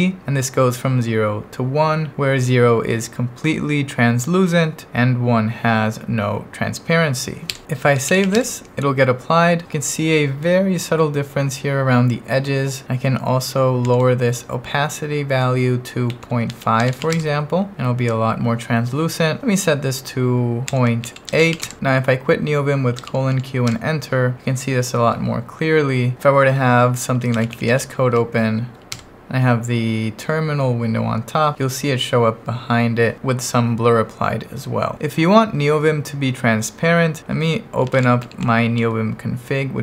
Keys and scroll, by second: 0.2 shift+v, 7.5 Escape, 7.8-8.7 typing, 13.8 shift+4, 15.8-17.5 typing, 20.4-22.0 typing, 23.0 shift+;, 23.3 q, 23.7 Return, 27.1-28.2 typing, 29.0 Return, 37.6-39.8 typing.